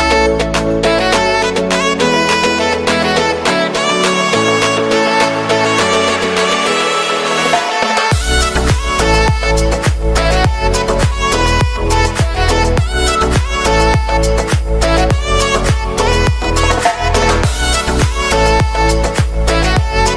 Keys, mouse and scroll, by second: 0.5-1.8 drag, 1.8 KP_Enter, 2.8-4.1 drag, 4.1 KP_Enter, 4.7-5.7 scroll down 1, 5.7-6.0 drag, 6.0-7.1 scroll down 1, 7.1-10.2 drag, 11.1 KP_Enter, 11.9 alt+a, 12.3 ctrl+s, 12.5-13.1 shift+middle drag, 13.1 space, 16.0 ctrl+s, 16.2 click, 17.3 click, 17.7-19.3 scroll down 1, 19.3-20.1 drag.